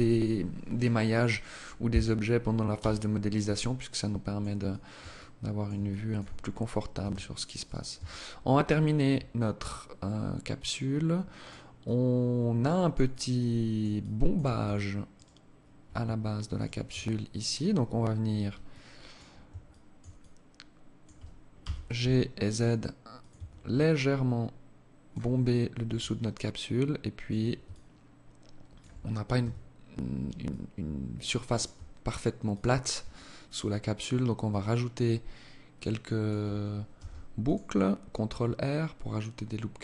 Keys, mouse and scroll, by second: 2.0 h, 2.8 alt+click, 3.8 alt+shift+click, 4.4 alt+click, 5.0 alt+shift+click, 5.6-6.0 scroll up 4, 6.2 Tab, 6.8 right click, 7.2 Tab, 8.6 alt+click, 11.0 alt+click, 12.3 alt+click, 13.2 alt+click, 14.4 alt+right click, 15.8 shift+right click, 17.9 alt+click, 18.9 alt+shift+click, 19.4 alt+click, 20.9 g, 22.6 Tab, 23.0 alt+click, 24.6-24.9 scroll up 5, 25.2 alt+click, 26.9 alt+shift+click, 28.2-28.6 scroll down 3, 28.6 Tab, 29.0-29.4 scroll up 2, 29.6 alt+click, 31.7 click, 32.4 alt+click, 36.2 ctrl+r.